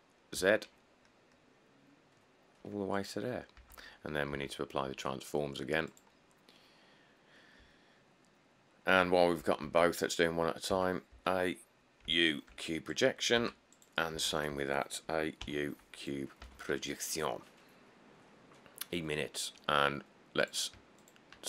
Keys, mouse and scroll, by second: 0.6 z, 3.8 Tab, 4.5 Tab, 6.6-7.0 click, 6.8 click, 6.9 click, 9.1 Tab, 9.9 Tab, 10.9 Tab, 13.6 Tab, 14.4 Tab, 16.6 Tab.